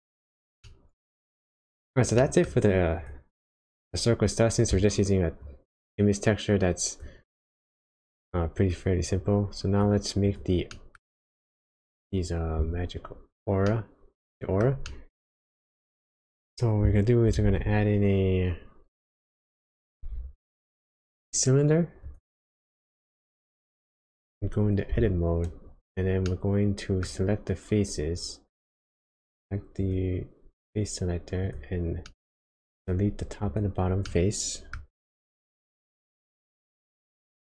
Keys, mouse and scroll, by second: 0.6 middle click, 2.2 middle click, 2.6-3.0 scroll up 1, 3.0 click, 3.4-5.1 scroll down 3, 5.4 click, 8.4 click, 9.1 click, 10.3 click, 10.7 middle click, 11.2-13.3 scroll up 1, 13.7 middle click, 14.9 shift+middle click, 15.4 shift+scroll up 1, 16.0 click, 17.4 shift+a, 20.2 shift+a, 24.9 Tab, 26.3 middle click, 29.8 click, 31.4 click, 32.1 middle click, 33.5 shift+click, 34.1 middle click, 35.5 x.